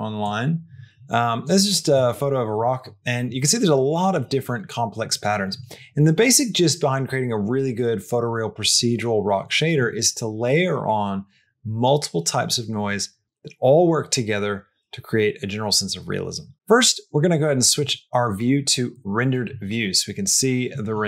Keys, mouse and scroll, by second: 17.7 middle click.